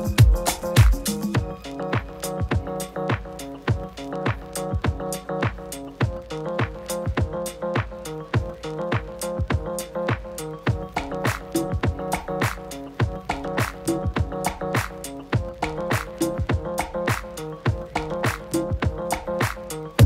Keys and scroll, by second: 8.4 super+-, 8.6 super+-, 8.8 super+-, 12.5 super+-, 12.7 super+-, 12.9 super+-, 13.3 super+-.